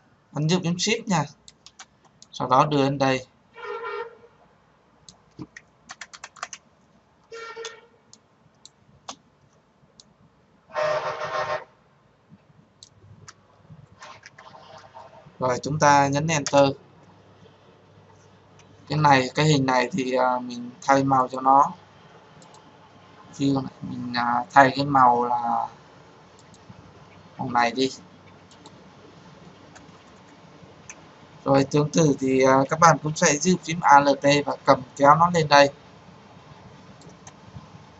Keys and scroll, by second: 16.1 Return.